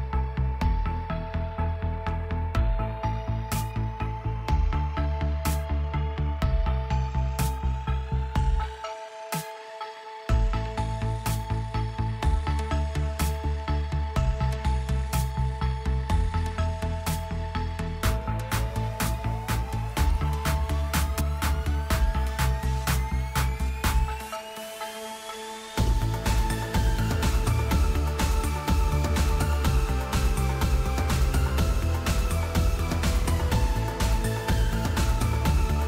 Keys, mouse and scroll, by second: 0.0-0.2 typing, 2.7-7.4 typing, 8.0 Return, 9.7 typing, 27.2-31.9 typing, 32.3 Return, 33.0 typing.